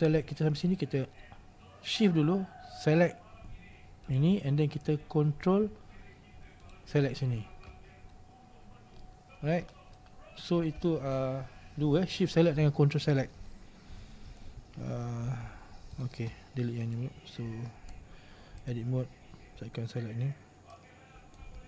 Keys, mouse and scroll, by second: 4.2 shift+right click, 6.7 ctrl+right click, 8.2-8.6 scroll down 2, 8.6-9.1 scroll up 1, 9.1-10.5 middle drag, 10.5-11.9 scroll down 1, 13.1-13.6 scroll up 2, 13.6-15.1 scroll down 2, 16.1 Tab, 17.0 right click, 18.8 Tab, 21.5 click.